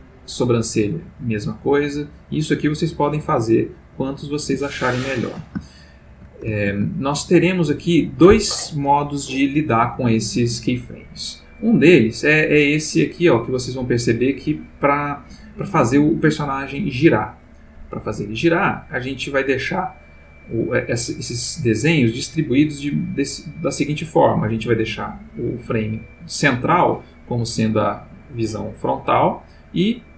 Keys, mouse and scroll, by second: 0.2-4.0 drag, 4.7-5.3 ctrl+middle drag, 5.7-6.4 ctrl+shift+middle drag, 6.9-7.6 ctrl+shift+middle drag, 12.3 click, 13.7 click, 29.8 click.